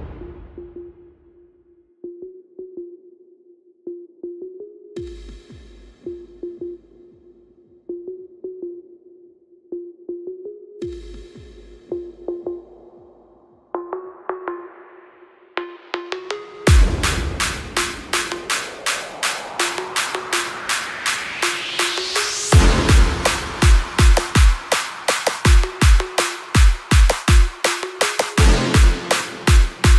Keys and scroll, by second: 7.8 Down, 8.0 Down, 16.9 ctrl+=, 17.2 ctrl+=, 17.3 ctrl+=.